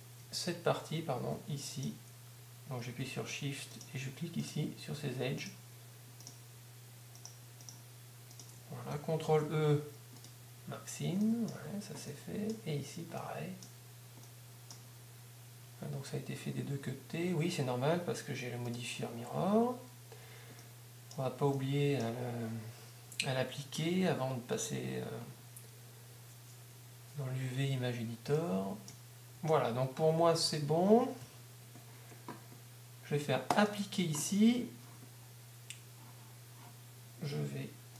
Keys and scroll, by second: 16.7 a, 17.0 a, 19.8 Tab, 29.4 Tab.